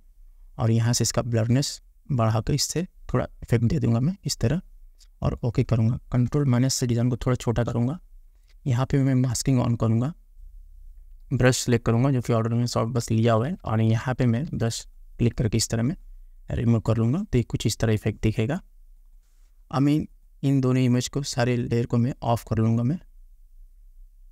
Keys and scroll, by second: 7.1 ctrl+-, 13.3 ], 14.6 ].